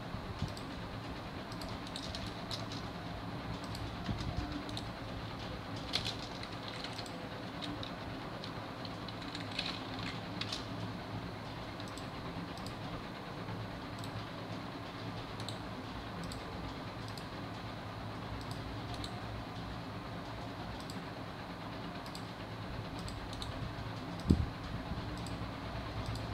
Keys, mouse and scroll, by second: 2.2 scroll down 1, 2.3 shift+middle click, 2.6 scroll up 1, 6.1 space, 6.6 1, 7.0 click, 8.1 Tab.